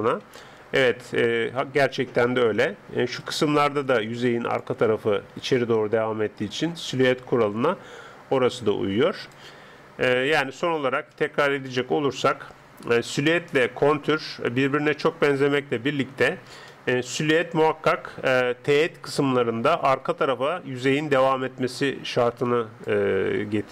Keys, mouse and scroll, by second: 0.0-4.6 middle drag, 2.7-9.5 d, 3.2 click, 6.4 click, 9.6-13.0 middle drag, 10.4 Escape, 16.7-20.6 middle drag, 19.9-20.6 d, 20.6 click, 22.9 d.